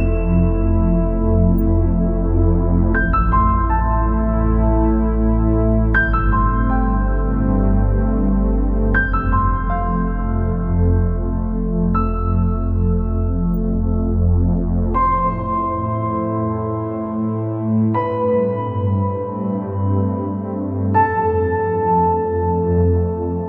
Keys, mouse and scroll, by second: 3.3 click, 6.6-13.9 drag, 14.3-14.6 scroll up 4, 14.6 scroll down 3, 14.9 middle click, 15.4 scroll up 3, 15.8 scroll down 1, 16.0-23.4 middle drag.